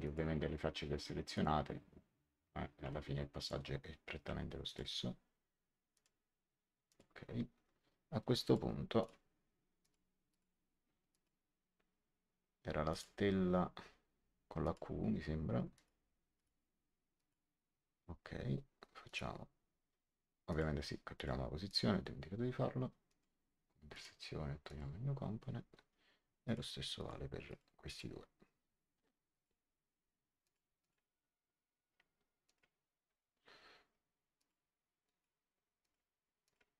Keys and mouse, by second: 0.0 click, 1.2 click, 3.3 ctrl+click, 5.8 click, 8.4 click, 12.8 click, 14.6 click, 15.7 click, 19.0 click, 20.4 click, 23.0 click, 26.4 click, 29.2 click, 30.3 click, 32.4 click, 34.3 click.